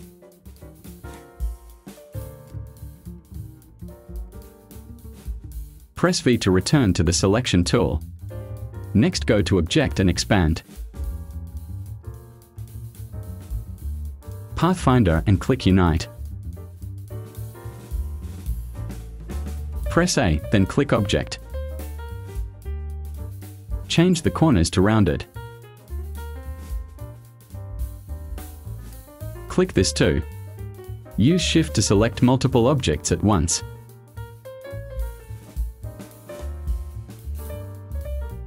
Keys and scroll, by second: 4.9 space, 6.7 v, 20.1 a.